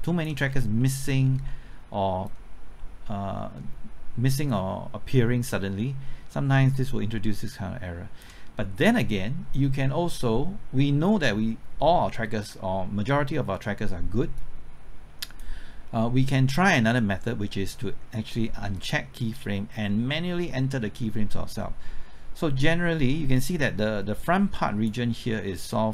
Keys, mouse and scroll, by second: 0.5-0.8 scroll down 1, 0.8 middle click, 1.2 scroll down 1, 1.5 middle click, 2.2-25.5 drag, 25.5 click.